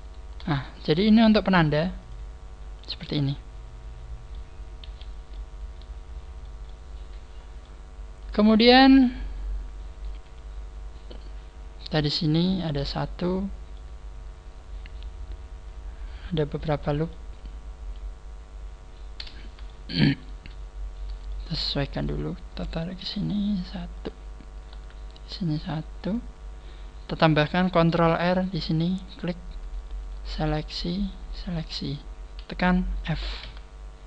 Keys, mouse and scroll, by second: 0.0 shift+right click, 2.0 click, 2.6-3.0 scroll down 3, 3.0 middle click, 4.8 KP_1, 5.3 middle click, 6.7 middle click, 8.2 right click, 8.5 middle click, 12.3 scroll up 1, 13.7 middle click, 13.7 scroll up 1, 18.6 scroll up 1, 19.6 shift+middle click, 19.6 scroll up 3, 20.1 right click, 23.1 g, 24.6 right click, 24.7 g, 28.4 ctrl+r, 30.0 shift+right click, 30.6 shift+right click, 31.0 shift+right click, 31.4 scroll down 3, 33.4 f.